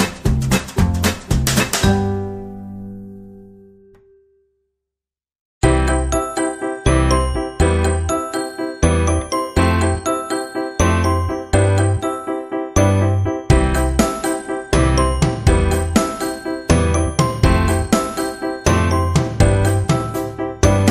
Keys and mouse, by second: 0.1 KP_1, 1.2-2.2 middle drag, 2.3 KP_3, 3.0 r, 4.1 g, 5.3 middle click, 5.8 Tab, 6.4-7.4 middle drag, 7.4 KP_1, 8.0 Tab, 8.8 g, 10.0 r, 11.8 g, 12.9 Tab, 13.3-15.3 middle drag, 15.4 KP_3, 16.0 KP_1, 16.6 Tab, 16.9 g, 18.0 r, 19.1 middle click, 19.8 middle click, 20.3 right click.